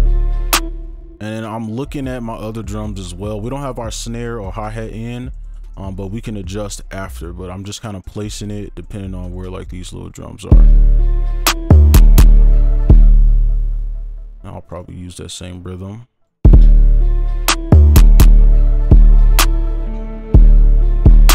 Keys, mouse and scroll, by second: 0.6 space, 0.9-1.6 scroll down 1, 1.6 ctrl+click, 4.9 ctrl+click, 7.7 ctrl+click, 9.5 ctrl+click, 10.0 ctrl+click, 12.3 space, 12.5 ctrl+click, 13.3 space, 13.5 ctrl+a, 14.1 shift+click, 14.8 shift+right click, 15.1 ctrl+click, 16.5 space, 16.9 right click.